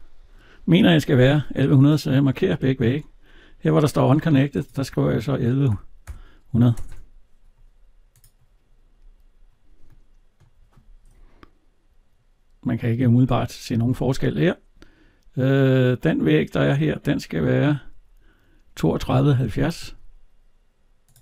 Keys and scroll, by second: 13.6 alt+Tab, 18.8 alt+Tab.